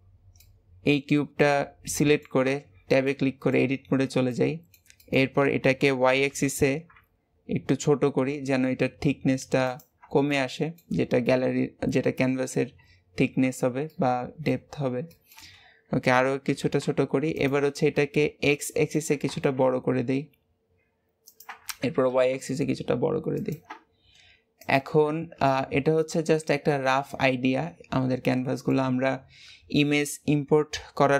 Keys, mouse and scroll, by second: 0.3-2.6 middle drag, 2.6 Tab, 3.0 middle click, 3.7-4.2 scroll up 2, 4.2-5.6 middle drag, 5.6 s, 10.2-13.3 middle drag, 13.9 middle click, 14.6-15.0 scroll up 2, 15.0 shift+middle click, 15.9 s, 17.7 middle click, 18.1 scroll down 4, 18.4 middle click, 19.1 s, 21.7 s, 24.6 click, 25.0 Tab, 25.4-28.5 middle drag.